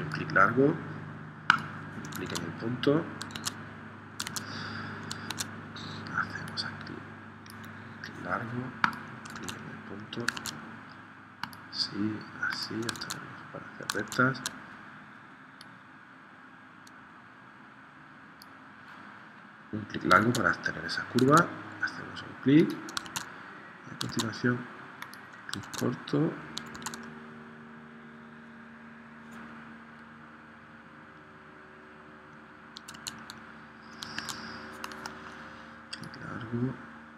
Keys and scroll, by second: 2.3 super+Tab, 3.4 super+Tab, 4.3 super+Tab, 5.3 super+Tab, 9.3 super+Tab, 10.4 super+Tab, 13.0 super+Tab, 14.0 super+Tab, 20.2 super+Tab, 21.3 super+Tab, 23.1 super+Tab, 24.2 super+Tab, 25.7 super+Tab, 26.7 super+Tab, 33.0 super+Tab, 34.2 super+Tab.